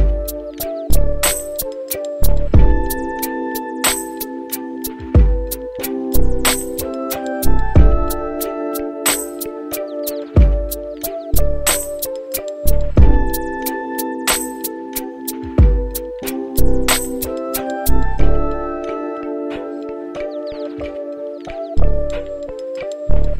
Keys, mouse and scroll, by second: 3.4 click, 4.8 click, 7.0-8.6 drag, 9.4 click, 10.7 click, 12.8-19.6 drag, 20.7 click, 21.3-23.3 right drag.